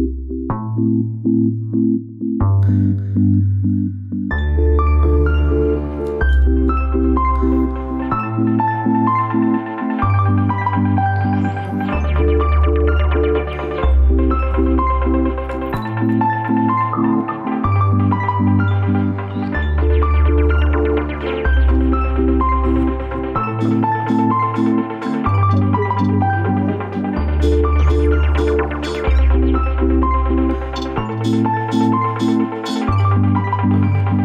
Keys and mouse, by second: 4.6 click, 5.6-7.6 middle drag, 10.8-12.0 middle drag, 12.8 alt+z, 13.4 alt+z, 14.2 alt+z, 15.2 Tab, 15.7 Tab, 18.2 click, 19.3 alt+shift+click, 21.1 alt+shift+click, 23.9-24.5 middle drag, 25.5 alt+shift+click, 26.1-27.7 middle drag.